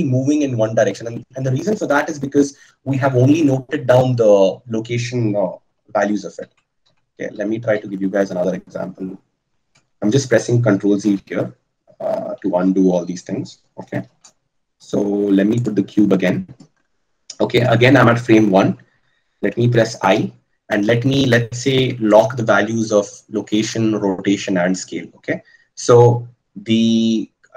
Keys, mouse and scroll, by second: 6.4 ctrl+z, 6.7 ctrl+z, 12.9 ctrl+z, 15.7 shift+a, 22.0-22.9 scroll up 1, 22.9-23.7 scroll up 1, 23.7 scroll up 1.